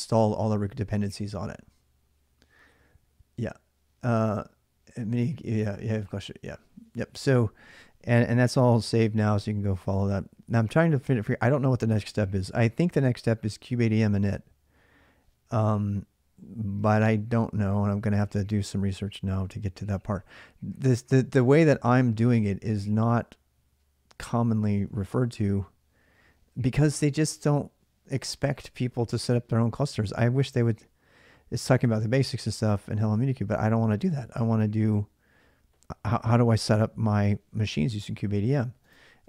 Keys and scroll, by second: 8.5 alt+Tab.